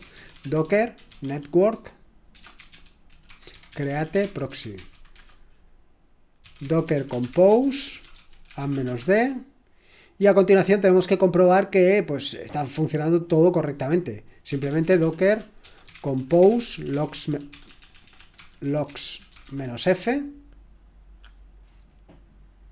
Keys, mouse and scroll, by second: 0.0-9.3 typing, 11.9 typing, 14.7-20.1 typing.